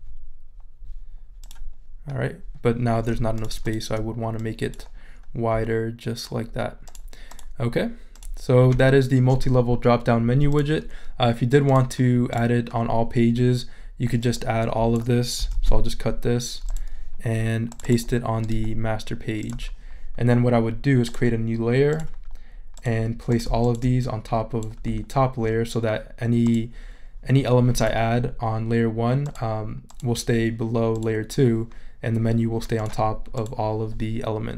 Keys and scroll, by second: 15.5 super+x.